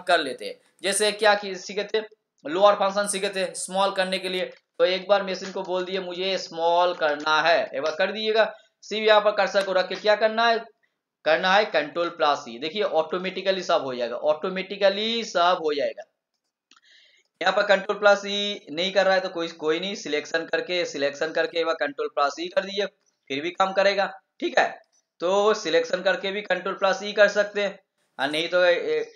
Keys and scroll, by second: 11.9 ctrl+e, 22.3 ctrl+e.